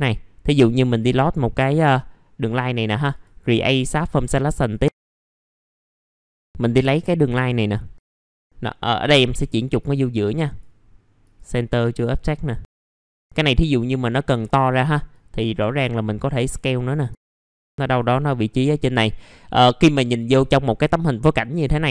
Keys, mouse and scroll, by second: 0.8 click, 1.4 scroll down 1, 3.1 click, 6.3 middle click, 7.2 click, 8.1 middle click, 9.0 click, 12.5 middle click, 12.9 click, 14.4 r, 15.1-17.1 drag, 17.1 w, 17.3 click, 19.3 middle click.